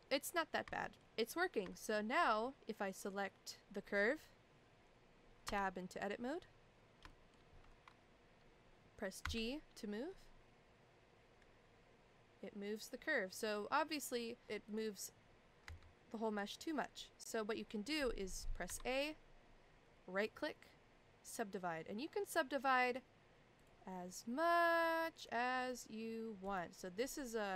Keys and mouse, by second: 0.8 shift+middle drag, 1.7 shift+middle drag, 2.5 middle click, 5.5 Tab, 7.1 shift+middle click, 9.2 g, 14.7 click, 15.6 g, 18.6 a, 20.2-21.3 right drag, 22.9-23.6 right drag, 24.1-24.8 right drag, 25.2-25.7 right drag.